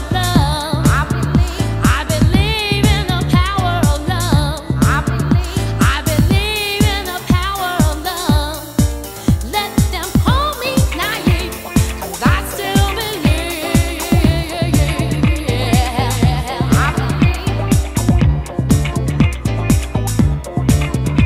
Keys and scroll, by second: 18.4 alt+i, 18.6 alt+2, 18.9 alt+3.